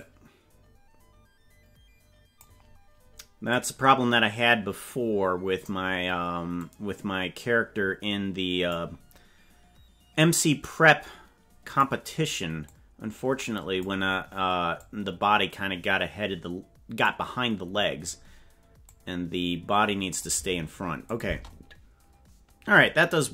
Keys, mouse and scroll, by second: 0.0 click, 1.8 click, 3.5 click, 6.6 click, 10.2-11.4 drag, 12.7-13.8 drag, 14.8-17.0 drag, 18.8-20.2 drag, 21.1 click, 21.2 space.